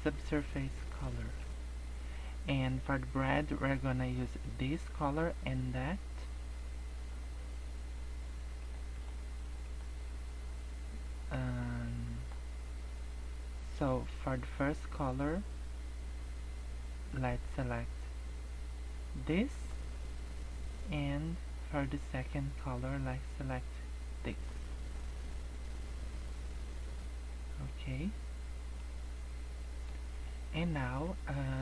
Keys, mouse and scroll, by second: 1.0 shift+middle click, 1.6 scroll up 1, 11.5 scroll up 1, 11.9 middle click, 14.6 click, 20.9 click, 25.4 scroll up 2, 27.1 scroll down 3, 27.3 middle click, 29.0-29.6 scroll up 5, 29.6 middle click, 30.1 scroll down 2, 30.2 middle click, 30.8 scroll down 1, 31.4 scroll up 1.